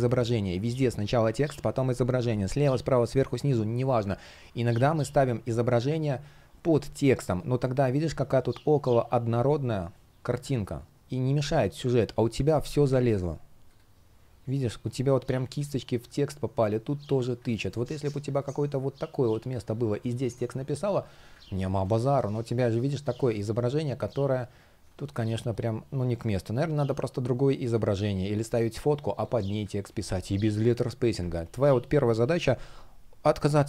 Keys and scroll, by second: 17.1 super+z, 21.3 super+z, 24.5 space, 29.5 super+z, 31.9 super+z.